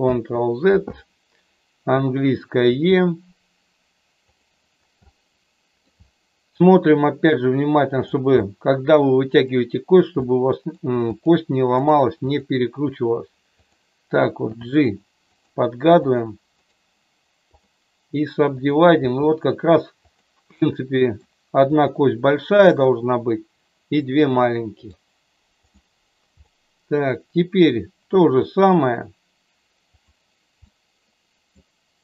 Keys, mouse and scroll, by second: 0.1 ctrl+z, 2.7 e, 4.2 click, 5.0 middle click, 7.6 click, 8.4-9.4 middle drag, 10.3 middle click, 11.0 click, 11.8 right click, 13.5 click, 14.5 g, 15.3 click, 15.9 click, 16.7-17.7 right drag, 18.4 click, 18.9 g, 20.1 click, 20.6 middle click, 21.7 click, 23.9 middle click, 26.3-27.5 middle drag, 28.3 e, 29.8 click, 30.7 middle click.